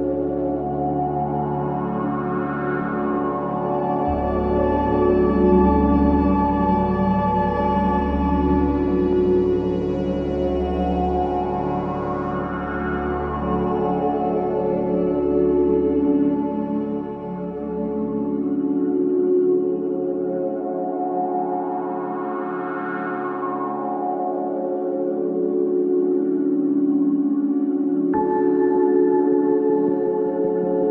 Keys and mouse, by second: 0.3-2.4 shift+drag, 3.5 Tab, 3.9 Tab, 5.1 click, 6.2 7, 7.4 g, 8.3 x, 9.5 Escape, 10.3 click, 11.3 g, 11.5 x, 12.8 click, 14.0-15.9 drag, 16.2-17.9 drag, 18.7 s, 19.1 y, 21.2 click, 24.2 Tab, 25.0 Tab, 25.6 click, 26.7 shift+click, 28.0 g, 28.6 x, 29.0 Escape, 29.6 r, 29.9 z.